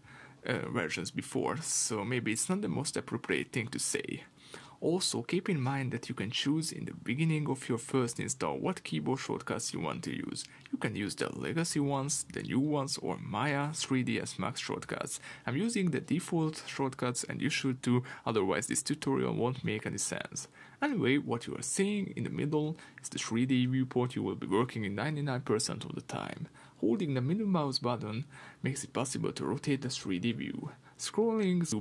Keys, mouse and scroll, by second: 7.1-27.1 drag, 27.1-31.8 middle drag, 31.7-31.8 scroll up 2.